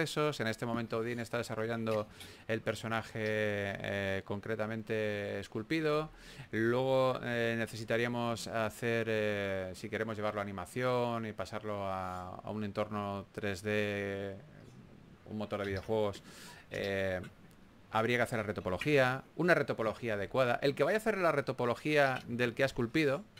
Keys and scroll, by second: 2.1 super+z.